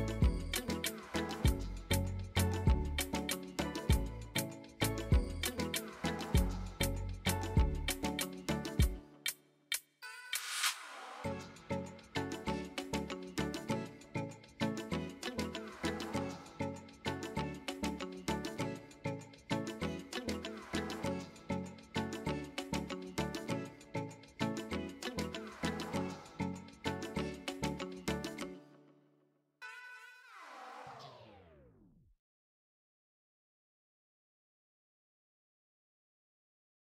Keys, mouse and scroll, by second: 0.1 click, 0.8 ctrl+g, 1.2 click, 1.5-3.6 drag, 3.6-4.0 scroll down 5, 4.0-6.8 drag, 6.8-7.4 scroll down 1, 7.4 click, 8.8 ctrl+g, 9.3-10.3 drag, 11.0-12.1 drag, 12.1-12.6 scroll down 5, 12.6-13.6 drag, 13.7-15.3 drag, 15.7-16.7 drag, 17.5 ctrl+g, 18.5-19.5 drag, 19.5-20.1 scroll down 4, 20.1-22.3 drag, 22.5-29.7 drag.